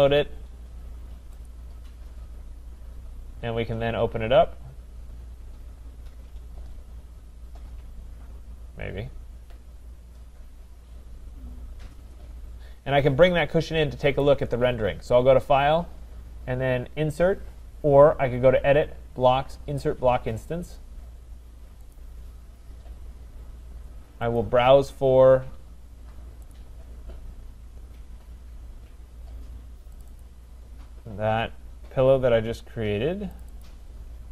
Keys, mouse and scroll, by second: 1.5 click, 14.2 click, 22.0 click, 24.4 click, 26.5 click, 30.0 click, 30.2 click, 33.4 click, 33.6 click.